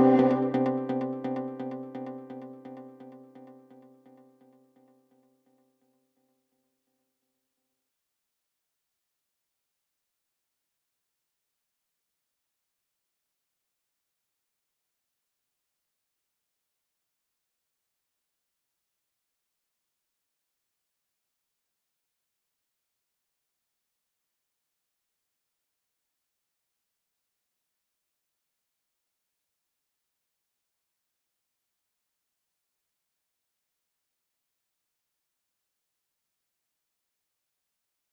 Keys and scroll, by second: 9.3 shift+F2, 10.3 F3, 20.6 shift+F2, 22.4 shift+F2, 25.7 Escape, 26.6 Delete, 28.5 Escape, 29.5 Delete, 32.6 Delete, 37.0 F3, 37.4 Escape.